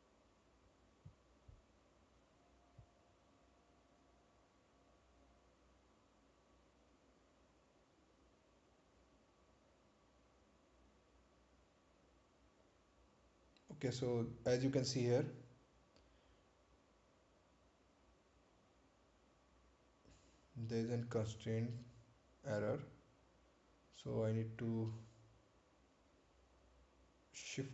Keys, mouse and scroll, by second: 10.4 scroll up 1, 14.1 click, 19.3 click, 21.0 scroll down 1, 25.2-25.8 scroll up 1, 26.3-26.8 scroll down 1.